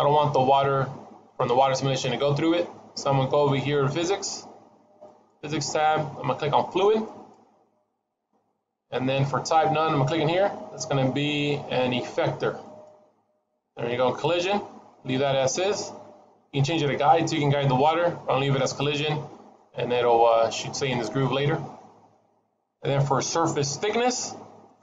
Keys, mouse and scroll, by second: 4.9 click, 6.9 click, 9.7 click, 16.4 click, 19.0 middle click, 24.6 click.